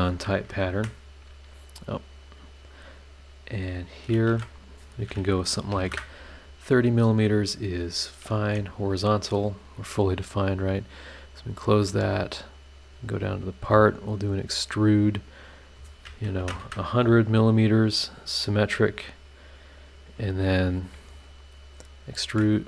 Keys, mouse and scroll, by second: 0.3 Escape, 2.1 click, 3.1 scroll up 1, 3.9 shift+click, 4.3 shift+h, 5.7 KP_3, 5.8 KP_0, 5.9 KP_Enter, 6.9 scroll down 2, 8.0 click, 8.4 h, 9.0 scroll down 2, 9.4 scroll up 2, 11.0 click, 12.1 click, 13.0 click, 14.1 click, 16.4 KP_1, 16.5 KP_0, 18.4 click, 19.0 click, 19.6 scroll down 2, 21.7 click, 22.2 ctrl+click.